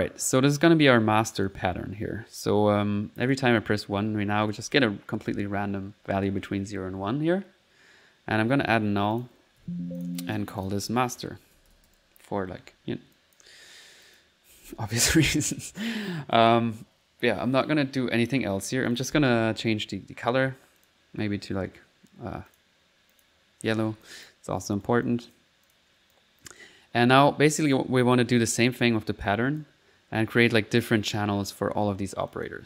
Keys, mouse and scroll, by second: 0.1 middle click, 0.4 click, 1.0 click, 3.3 click, 3.4-6.9 typing, 3.8 middle click, 9.1 click, 9.6 alt+n, 10.0 alt+click, 10.2 alt+click, 13.1 click, 14.0 click, 15.1 typing, 18.9 click, 19.5 c, 20.8 click, 21.3 click, 22.5 click, 23.1 click, 23.8 c, 24.0 click, 24.4 click, 24.6 right click, 25.0 c, 25.0 click, 25.6 click, 26.0 click, 27.2 middle click, 27.8 middle click, 28.0 click, 28.8 middle click, 29.3 click, 32.3 click.